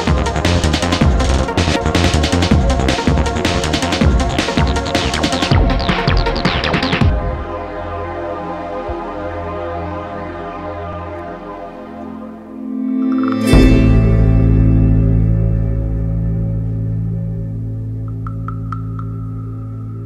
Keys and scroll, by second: 0.1 ], 0.9 ], 4.3 ], 5.2 ], 8.1 ], 8.7 Return, 9.2 F1, 9.4 Escape, 10.3 Escape, 10.4 `, 11.4 ].